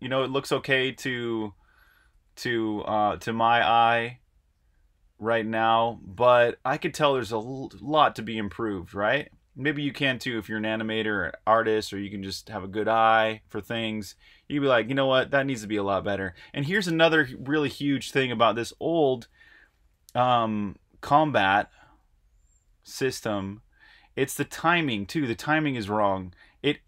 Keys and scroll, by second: 0.0-2.4 typing, 4.9-5.7 typing, 11.1-17.3 typing, 21.2 Right, 22.7 Right, 23.4-24.0 typing.